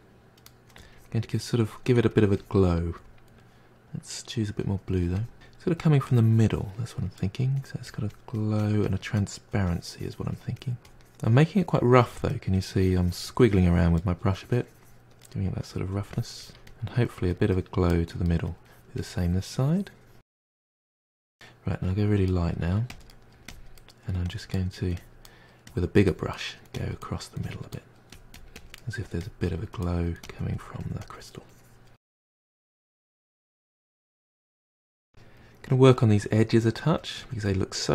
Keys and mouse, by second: 2.7-3.1 middle drag, 3.1-3.8 drag, 3.8 middle click, 4.0-4.9 drag, 4.9 middle drag, 5.2-6.4 drag, 6.4-6.9 middle drag, 6.9 f, 7.2-7.7 drag, 7.7 middle drag, 8.0-9.3 drag, 9.3 middle drag, 9.6-10.3 drag, 10.3 middle drag, 10.5-10.9 drag, 10.9 middle drag, 11.1-11.7 drag, 11.7-12.2 middle drag, 12.2 click, 12.7 f, 13.1-14.0 middle drag, 14.0-15.4 drag, 15.4 middle drag, 15.6 drag, 15.9 middle drag, 16.1-16.7 drag, 16.7 middle drag, 16.9-17.3 drag, 17.3 middle drag, 17.5 drag, 17.8 middle drag, 18.1-18.4 drag, 18.4 middle drag, 18.7 drag, 18.9 middle drag, 19.2-19.6 drag, 19.6 middle drag, 19.8-20.4 drag, 20.4 middle drag, 20.7-21.7 drag, 21.7 middle click, 21.9 f, 22.1 middle drag, 22.2 click, 22.3 middle drag, 22.5 click, 22.6 middle drag, 22.8 click, 22.9 middle drag, 23.1 drag, 23.3 middle drag, 23.5 click, 23.6 middle drag, 23.8 click, 23.9 middle drag, 24.1 drag, 24.3 middle drag, 24.5 drag, 24.7 middle drag, 24.9-25.6 drag, 25.6 middle drag, 25.8 click, 25.9 middle drag, 26.1 drag, 26.2 middle click, 26.3 drag, 26.6 middle drag, 26.7-27.1 drag, 27.1 middle click, 27.2-27.6 drag, 27.6 middle drag, 27.7-28.2 drag, 28.2 middle drag, 28.3 drag, 28.5 middle drag, 28.6 drag, 28.8 middle click, 29.0-29.5 drag, 29.5-31.5 ctrl+middle drag, 32.0-35.0 ctrl+middle drag, 35.2 click, 35.5 f, 35.9-37.9 drag.